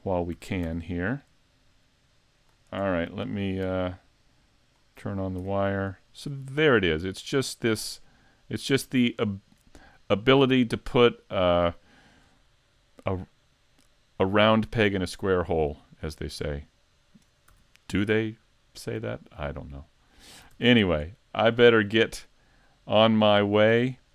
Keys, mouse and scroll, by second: 0.4 a, 0.6 a, 2.4 click, 4.2 alt+click, 4.7 click, 5.1 scroll down 4, 5.4 a, 5.9 middle click, 6.7-7.1 scroll up 3, 7.1 middle click, 7.9 right click, 8.4 middle click, 9.3 scroll down 5, 10.0 middle click, 12.0-12.5 scroll down 2, 12.5 shift+middle click, 13.1 middle click, 15.1 scroll down 3, 15.7 shift+middle click, 16.5 middle click, 17.5 a, 17.9 middle click, 20.5 s, 21.4 shift+middle click, 22.0 middle click, 23.4 middle click, 23.4 shift+middle click.